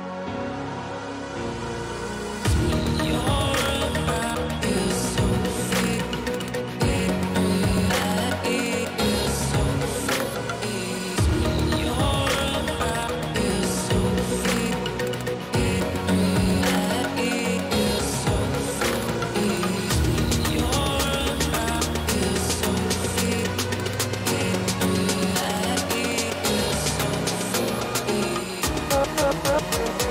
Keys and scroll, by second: 3.5 v, 6.6 t, 16.8 ctrl+o, 25.1 ].